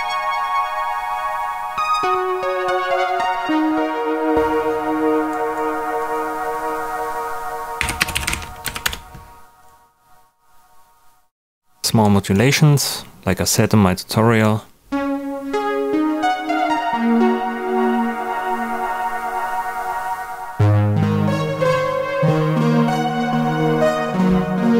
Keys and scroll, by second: 7.5-8.7 typing, 8.8 Return.